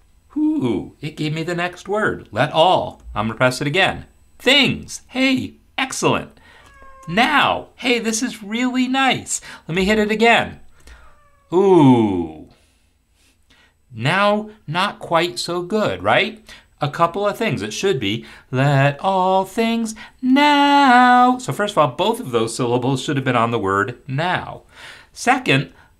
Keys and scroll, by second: 3.8 ctrl+v, 6.7 ctrl+v, 10.4 ctrl+v.